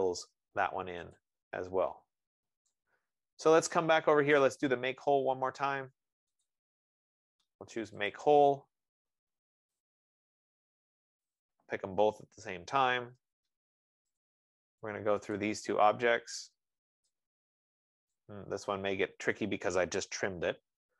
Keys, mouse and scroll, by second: 0.6-1.0 scroll, 1.4 click, 1.7-2.5 typing, 2.5 scroll, 4.3 right click, 6.9 click, 13.6 Return, 14.5 click, 15.8 click.